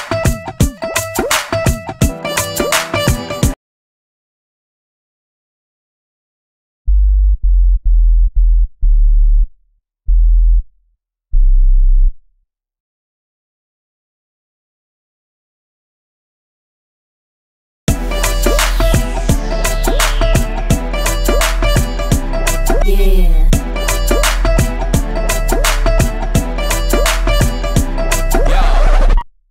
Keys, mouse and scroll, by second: 1.6-4.9 drag, 12.5 F1, 13.8-15.1 drag.